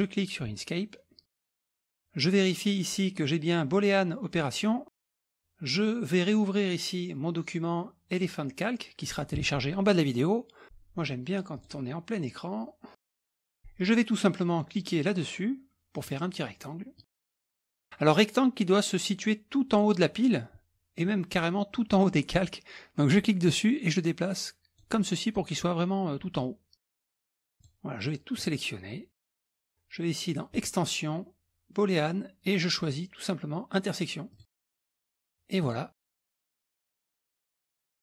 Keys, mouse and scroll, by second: 2.2 click, 9.1 click, 11.6 click, 12.9 click, 13.2-14.2 middle drag, 16.0 click, 17.0 click, 23.2-25.1 drag, 26.9 middle click, 27.6-28.2 drag, 28.4-29.5 drag, 30.5 click, 34.3 click, 35.6 click, 37.3 middle click, 37.3 scroll down 1, 37.5 click.